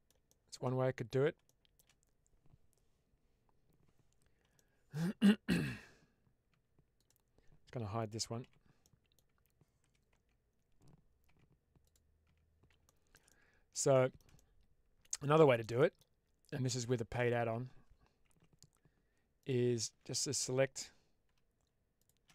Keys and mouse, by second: 0.2 shift+middle click, 1.4 shift+middle click, 4.6 shift+middle click, 5.6 Tab, 6.4 Tab, 8.7-9.0 middle drag, 9.2 Tab, 10.0 Tab, 11.7 click, 12.7 shift+Tab, 12.9 middle click, 13.2 middle click, 13.8 middle click, 14.3 middle click, 15.3 shift+middle click, 15.7 middle click, 16.8 alt+click, 20.1 middle click, 21.9 alt+shift+click.